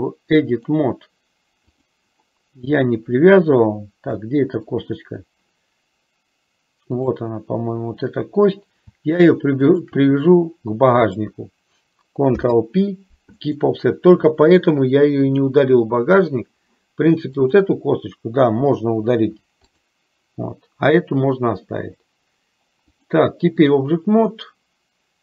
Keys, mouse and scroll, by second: 0.6-2.1 drag, 4.4 shift+middle click, 7.0 click, 9.9 shift+click, 12.4 ctrl+p, 15.3-16.8 drag, 17.5 click, 19.4 Delete, 23.0-24.0 drag.